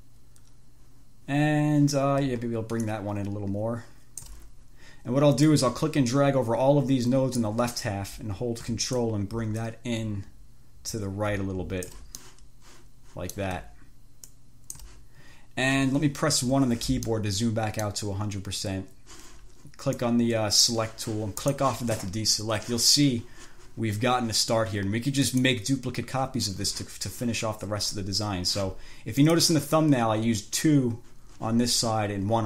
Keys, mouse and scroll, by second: 3.1-4.7 ctrl+drag, 5.8-7.9 drag, 9.3-12.4 ctrl+drag, 12.5-13.9 ctrl+drag, 14.6 ctrl+click, 16.7 1, 17.4 click, 20.3 click, 21.7 click, 25.5 click, 29.4 click.